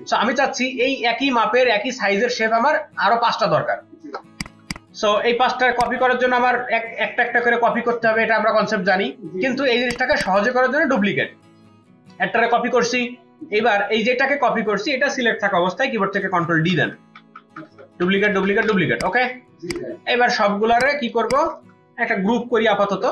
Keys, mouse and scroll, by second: 4.3 space, 4.4 ctrl+click, 9.7 ctrl+space, 9.9 ctrl+alt+click, 15.9 ctrl+d, 16.2 ctrl+d, 16.5 ctrl+d, 16.8 ctrl+d, 17.0 ctrl+d, 17.2 ctrl+d, 17.4 ctrl+d, 17.6 ctrl+d, 17.8 ctrl+d, 18.0 ctrl+d, 18.3 ctrl+d, 18.5 ctrl+d, 20.6 space, 21.3 ctrl+alt+click, 22.6 ctrl+g.